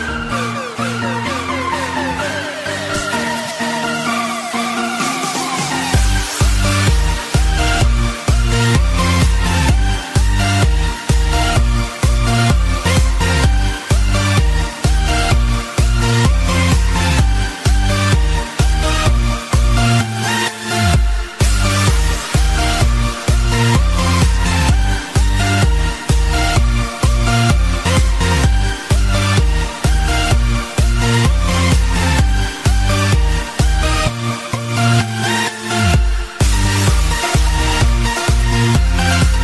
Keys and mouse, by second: 1.9 click, 4.0 click, 6.0 click, 7.3 click, 12.5 click, 15.2 click, 15.6 click, 17.8 click, 17.8 space, 18.2 click, 22.5 space, 25.2 space, 27.8 click, 29.3 click, 29.3 space, 31.6 click, 32.7 click, 35.1 click, 36.9 click, 37.1 click, 38.6 click.